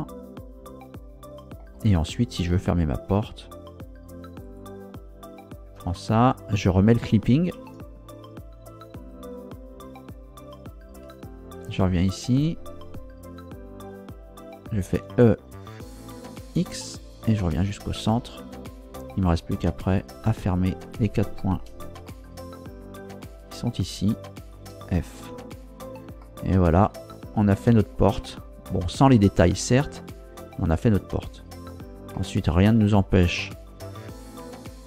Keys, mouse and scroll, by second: 4.4 right click, 5.4 shift+right click, 7.6 ctrl+Down, 9.0 click, 11.6 ctrl+Down, 14.9 e, 16.6 x, 17.7 click, 20.0 right click, 20.8 shift+right click, 22.1-23.4 shift+middle drag, 23.8 shift+right click, 24.4 shift+right click, 25.2 f, 26.2-27.7 middle drag, 28.2 Tab, 30.7-31.4 scroll up 4, 32.1 middle click, 33.4 Tab.